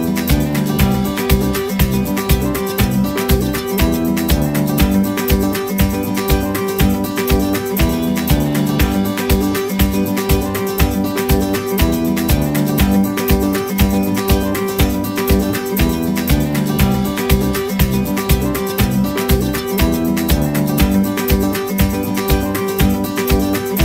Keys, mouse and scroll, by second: 1.1 scroll up 1, 8.7 middle click, 11.6 scroll down 1, 13.1 middle click, 14.4 right click.